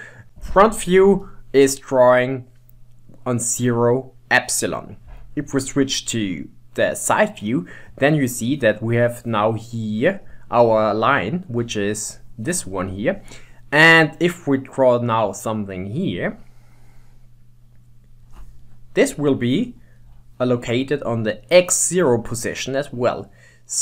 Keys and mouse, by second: 1.2 KP_1, 2.6 middle click, 5.5 KP_3, 11.7 KP_1, 12.9 KP_3, 16.1-18.7 drag, 18.7-21.7 middle drag, 23.3 middle click.